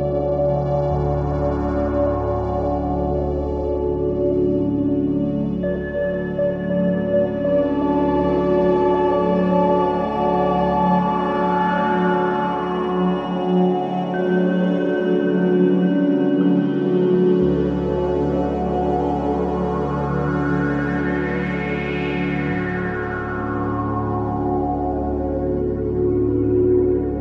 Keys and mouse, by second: 0.3-1.6 drag, 4.2-4.6 drag, 4.8-5.3 drag, 4.8 space, 5.6 space, 7.8 click, 8.9-9.4 drag, 9.6 click, 9.6-10.8 typing, 11.9-13.7 drag, 13.1 typing, 14.3-20.0 typing, 14.6 click, 16.8 click, 18.6-19.5 drag, 21.4 click, 21.4-22.8 typing, 24.0-25.3 typing, 24.0-25.9 drag, 26.4-27.2 typing.